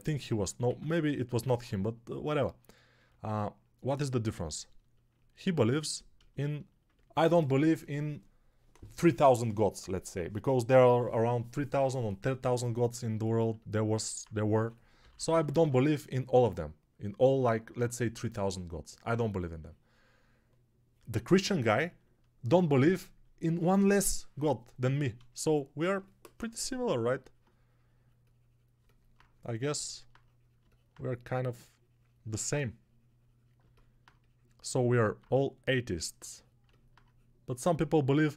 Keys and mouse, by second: 0.5 1, 5.0 ctrl+alt+click, 5.0 ctrl+alt+middle click, 5.0 ctrl+alt+right click, 14.4-15.5 typing.